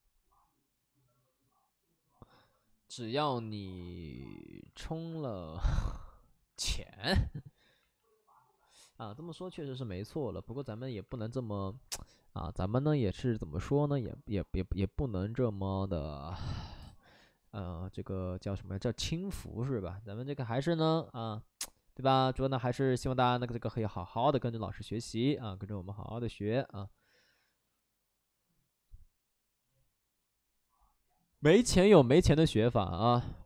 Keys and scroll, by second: 3.5 alt+s, 3.9 shift+f, 4.4 shift+f, 4.8 alt+s, 5.6 d, 6.4 Escape, 7.3 alt+s, 7.8 shift+f, 9.4 shift+f, 10.6 ctrl+z, 11.1 shift+f, 11.4 shift+f.